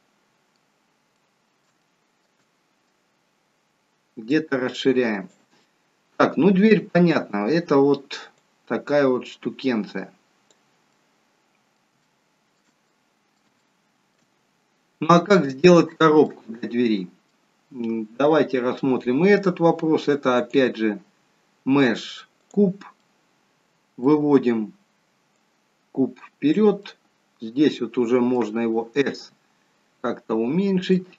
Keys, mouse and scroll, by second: 0.8-1.6 scroll up 4, 1.1 middle click, 1.7 shift+middle click, 2.3 middle click, 4.2 click, 5.6 middle click, 8.3 click, 10.8 middle click, 12.0 shift+middle click, 12.0-12.3 shift+scroll up 1, 12.9 middle click, 13.6 shift+middle click, 16.2 middle click, 20.4 click, 23.0 middle click, 25.2 click, 27.4 middle click, 29.0 s.